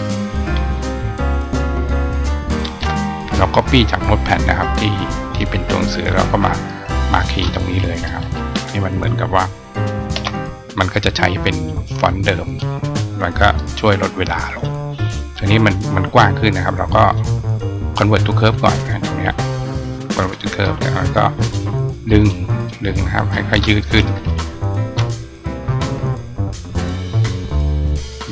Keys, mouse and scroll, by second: 5.1 click, 6.3 click, 12.3 click, 13.5 click, 15.2 click, 16.9 click, 18.2 click, 19.3 right click, 20.1 click, 21.3 click, 21.9 click, 22.4 click, 22.8-23.1 drag, 27.2-28.1 ctrl+drag.